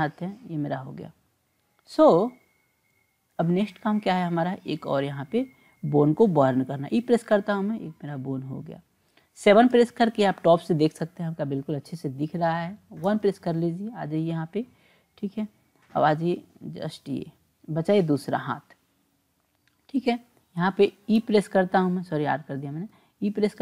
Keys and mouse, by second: 3.3-4.5 drag, 6.9 e, 9.7 KP_7, 13.1 KP_1, 15.8-18.4 drag, 19.7 click, 21.2 r.